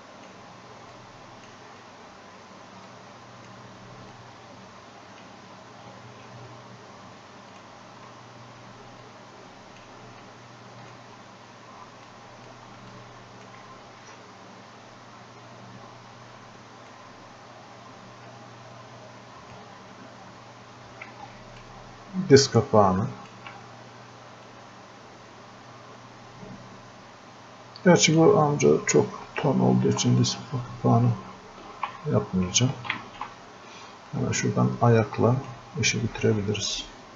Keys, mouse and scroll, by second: 9.1-16.1 drag, 16.9-19.9 drag, 19.9-20.6 scroll up 1, 22.0-23.5 ctrl+drag, 24.8-28.3 drag, 31.5 click, 31.8 ctrl+z, 34.2-35.9 drag, 35.9 scroll up 1.